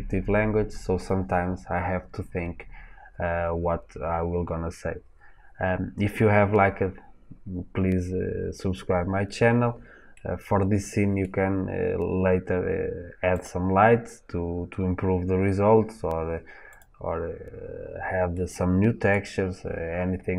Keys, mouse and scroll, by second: 11.5-12.2 scroll down 2, 12.2-13.2 scroll up 2, 13.2 click, 16.6 click, 18.2-20.3 middle drag.